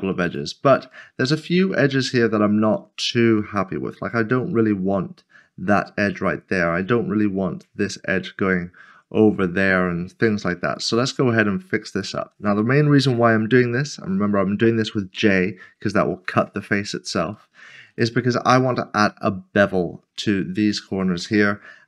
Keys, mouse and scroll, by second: 0.2 click, 7.8 middle click, 10.7 click, 11.2 s, 11.9 shift+click, 16.6 j, 16.8 middle click, 17.5 shift+middle click, 20.1 scroll up 1, 20.7 shift+middle click.